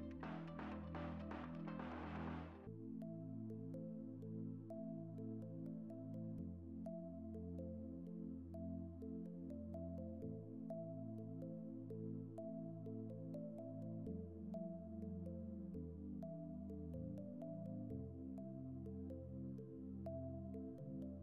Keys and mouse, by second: 0.0 middle click, 0.3 click, 0.7 click, 1.1 click, 2.4 middle click, 2.9 middle click, 3.2 KP_7, 4.3 click, 4.5 2, 5.5 a, 5.7 middle click, 6.1 r, 6.7 click, 7.0 middle click, 7.5 a, 7.6 click, 7.9 click, 8.6 middle click, 9.2 middle click, 9.3 click, 9.7 ctrl+z, 9.7 click, 10.6 middle click, 11.1 click, 11.5 middle click, 11.9 ctrl+z, 12.1 click, 12.6 middle click, 13.0 middle click, 13.3 click, 13.7 middle click, 13.9 click, 14.5 middle click, 15.0 middle click, 15.1 middle click, 15.3 middle click, 16.5 middle click, 17.1 alt+click, 17.8 ctrl+z, 17.8 click, 18.0 ctrl+r, 18.9 click, 19.0 click, 19.4 ctrl+z, 19.6 click, 19.9 click, 20.4 middle click.